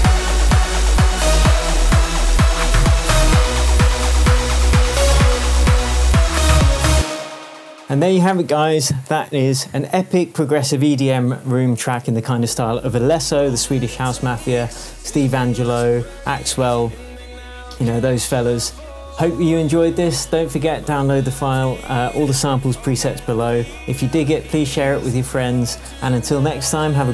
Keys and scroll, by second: 0.9 super+v, 6.9 space, 7.5 super+space, 8.0 super+s.